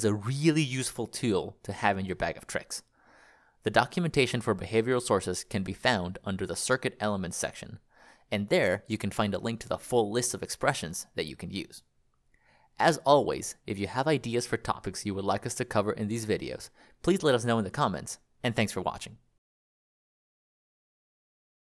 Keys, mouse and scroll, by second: 1.2 click, 3.1-4.0 scroll, 7.1 click, 8.1-11.1 scroll, 14.0 click, 16.1 ctrl+click.